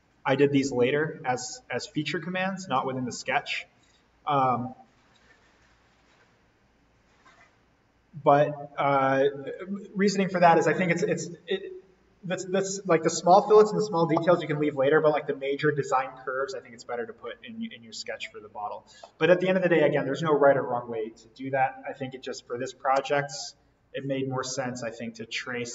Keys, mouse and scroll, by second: 2.2-2.7 scroll up 1, 5.0-6.3 scroll down 1, 6.3-7.3 scroll up 1, 7.3-8.2 scroll down 1, 8.2-8.6 scroll down 1, 17.9-18.2 scroll down 1, 18.2-18.6 scroll up 1.